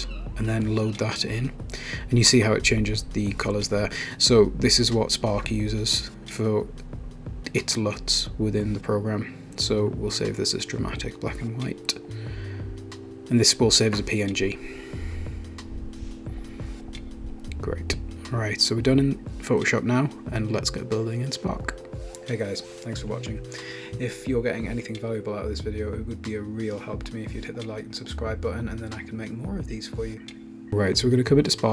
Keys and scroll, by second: 7.5-12.3 typing, 15.1 Return, 19.1 super+w.